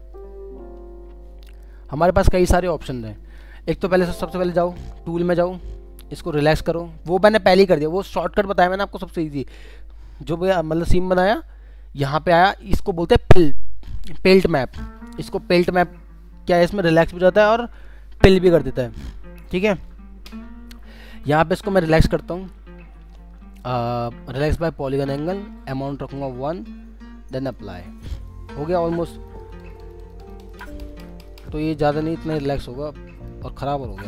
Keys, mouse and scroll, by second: 0.5 scroll up 1, 2.6-3.0 scroll down 1, 3.0 middle click, 29.1 double click, 32.7 scroll up 1, 33.9 double click.